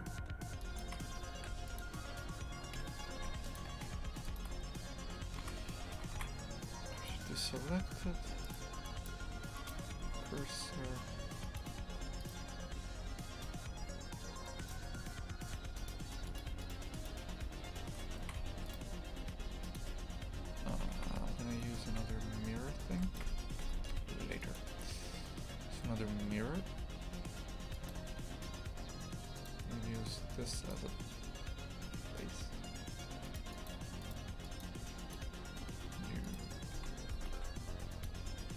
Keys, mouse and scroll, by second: 0.0 shift+click, 0.8 shift+click, 1.8 Delete, 2.8 l, 3.6 Delete, 3.9 2, 4.3-7.1 alt+shift+right drag, 7.1 shift+s, 7.9 Tab, 9.7 click, 10.0 Tab, 14.7-18.2 drag, 18.2 shift+f, 20.7 Tab, 21.0 shift+f, 23.2 Tab, 23.6 Tab, 29.6 click, 33.3-36.8 drag, 36.8 shift+f.